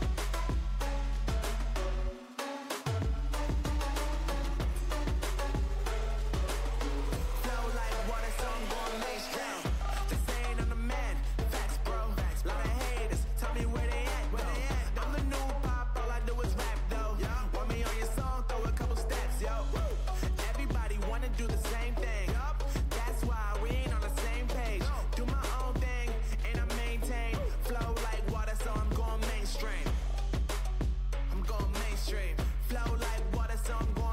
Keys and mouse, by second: 0.2 Tab, 1.2-3.3 drag, 3.7 click, 4.2 z, 5.6-7.6 drag, 8.1 Tab, 12.6 Tab, 20.8 z, 21.2 z, 25.3-26.8 middle drag, 26.8 z, 27.2 z, 30.9-34.1 drag.